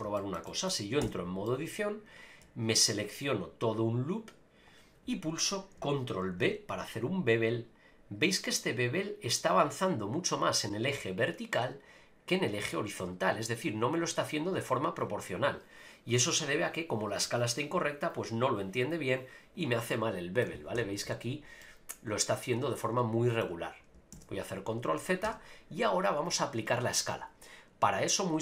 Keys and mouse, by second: 0.1 shift+middle click, 0.5 middle click, 1.0 Tab, 1.4 middle click, 3.0 alt+click, 6.3 ctrl+b, 19.5 click, 19.9 middle click, 20.7 KP_Enter, 21.0 KP_Decimal, 21.6-23.4 drag, 24.1 ctrl+z, 25.2 Tab.